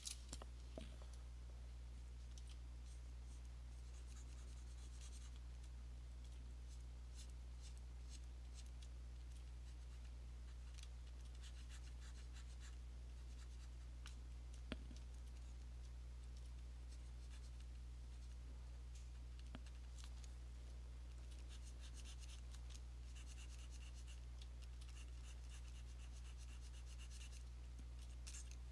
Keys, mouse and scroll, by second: 1.7 $, 2.0 alt+click, 2.4 alt+click, 3.1 click, 3.5 click, 4.0 click, 4.3 alt+click, 5.4 click, 6.3 alt+click, 6.8 click, 7.3 click, 7.8 click, 8.3 click, 8.4 alt+click, 8.7 click, 8.8 alt+click, 9.3 alt+click, 10.1 click, 10.8 click, 11.2 alt+click, 11.6 click, 11.9 click, 12.2 click, 12.8 click, 14.0 click, 15.2 alt+click, 15.6 click, 16.4 alt+click, 16.8 click, 17.0 click, 17.6 click, 17.9 click, 18.0 alt+click, 18.4 click, 19.0 alt+click, 19.4 click, 19.9 click, 20.7 click, 21.3 alt+click, 22.4 click, 24.2 click, 24.8 alt+click, 25.1 click, 25.4 click, 25.7 click, 27.4 click, 27.8 alt+click, 28.2 click, 28.5 click.